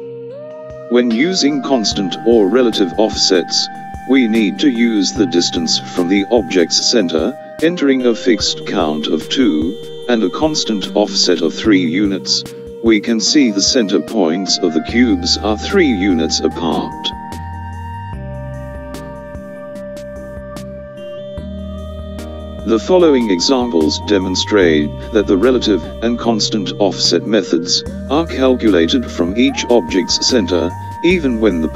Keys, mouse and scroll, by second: 5.3 click, 10.9-25.5 drag, 29.8-31.7 drag.